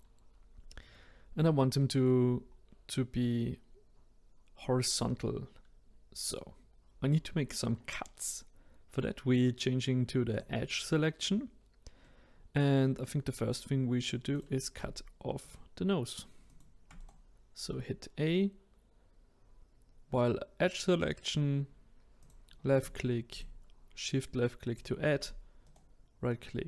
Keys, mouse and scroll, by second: 1.8 middle click, 2.3-5.4 scroll down 1, 6.8-9.9 scroll up 1, 10.3-12.0 drag, 12.0-13.5 middle drag, 13.5-14.3 scroll up 1, 14.3-15.5 drag, 16.5 shift+click, 17.0-20.0 right drag, 22.2 click, 23.3-24.7 shift+drag, 25.6-26.6 right drag.